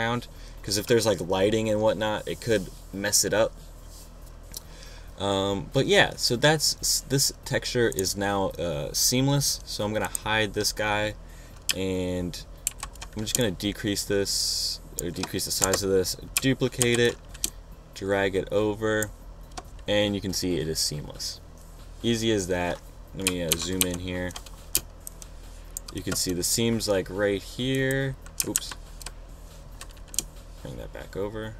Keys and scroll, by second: 13.3 super+t, 13.9 shift+super+t, 16.3 shift+Return, 16.9 Return, 17.5 super+j, 18.1 shift+super+j, 24.1 super+=, 25.4 super+space, 29.2 super+z.